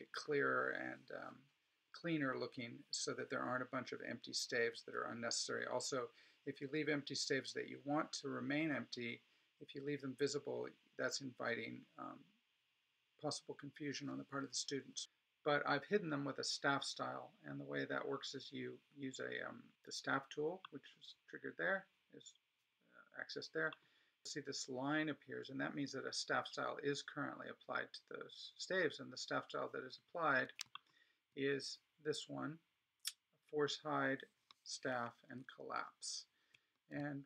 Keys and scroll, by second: 35.3 alt+super+=.